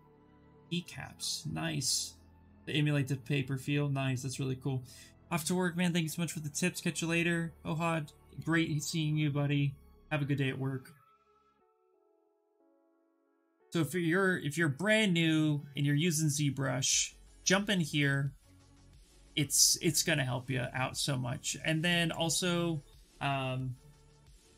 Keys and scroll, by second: 23.8-24.5 typing.